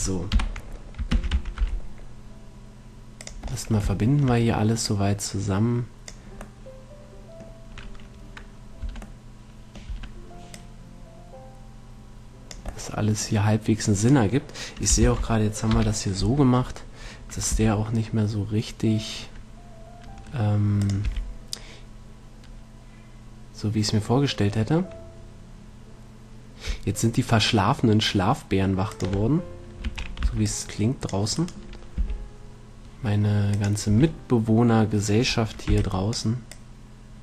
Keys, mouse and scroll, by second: 0.8 KP_3, 1.4 shift+d, 5.1 click, 5.5-6.7 right drag, 7.1 middle click, 9.1 Tab, 10.2 Tab, 10.8 click, 14.7-15.9 right drag, 15.3 ctrl+l, 16.1 KP_7, 17.8 g, 21.2-23.1 drag, 21.4 r, 30.1 a, 30.5 c, 31.8-33.7 right drag, 32.3 g, 33.9-35.9 drag, 34.2 a, 36.0 b, 36.8-37.2 drag.